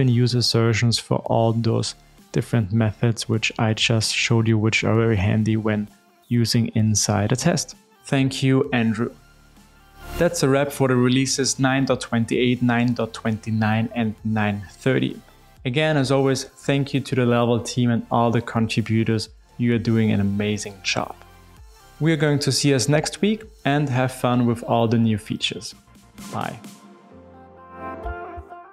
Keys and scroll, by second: 2.0 alt+BackSpace.